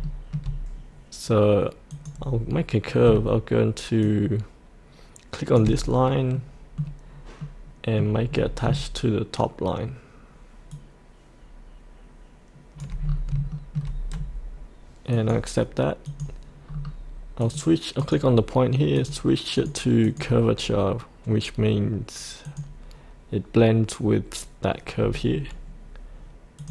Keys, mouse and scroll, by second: 0.0 shift+middle click, 1.9 click, 4.0-5.6 shift+drag, 6.4-7.4 middle drag, 8.3-8.6 scroll down 1, 10.7-12.8 shift+drag, 13.0 scroll up 1, 13.5 shift+middle click, 15.1 click, 16.7-17.4 scroll down 1, 17.4 click, 20.6-22.4 scroll down 1, 22.4 click, 25.0-26.6 scroll up 2, 26.6 click.